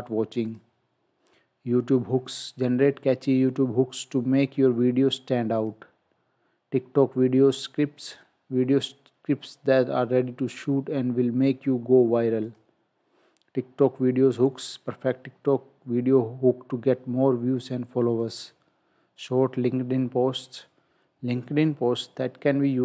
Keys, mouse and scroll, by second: 0.5 click, 5.6 click, 12.5 click, 18.2 click.